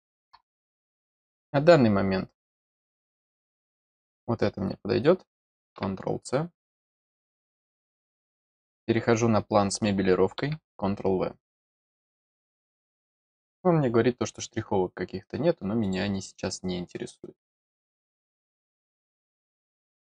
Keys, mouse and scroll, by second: 0.7 middle click, 0.7-1.7 scroll up 2, 1.0 middle click, 1.9 middle click, 1.9 scroll down 1, 2.9 click, 7.0 click, 11.8 click, 15.8 click, 17.6-18.5 scroll down 2, 19.0 scroll down 1, 19.1 scroll up 1, 19.5 click, 19.9-20.0 scroll up 2.